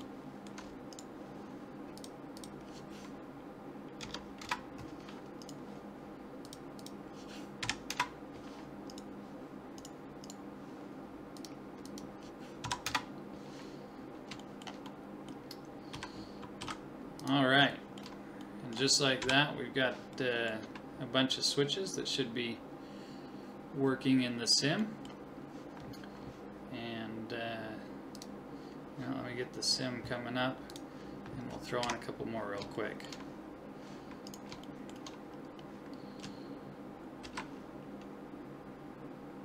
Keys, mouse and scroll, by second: 0.1-1.9 middle drag, 0.9-3.6 drag, 2.0 right click, 5.4-6.4 right drag, 6.4 middle click, 7.3 click, 8.9 right click, 9.4 right click, 11.4 middle click, 13.9 middle click, 15.9 a, 16.6 ctrl+s, 19.2 KP_1, 21.7 middle click, 24.8-26.7 middle drag, 31.8 KP_1, 32.8 middle click, 34.3-36.0 drag, 35.4 right click, 35.8 right click, 36.5 middle click, 37.2 shift+d.